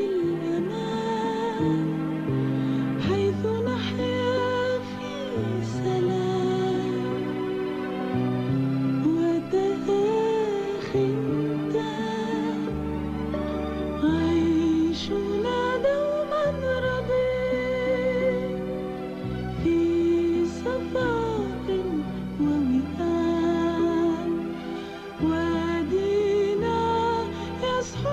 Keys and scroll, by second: 1.4 typing, 11.1 ctrl+d, 15.0 ctrl+d, 16.0 -, 17.6 typing, 20.4 typing.